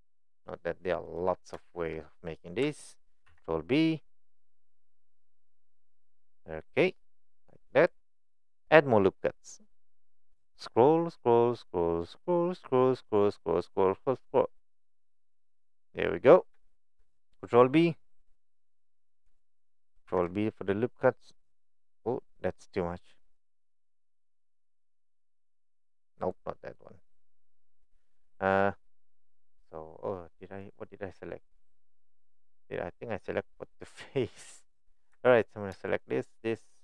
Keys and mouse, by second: 1.6 shift+middle click, 3.3 ctrl+b, 15.7 right click, 16.6 shift+middle click, 20.1 ctrl+b, 30.6 click, 32.4 click, 33.6 click, 35.3 alt+click.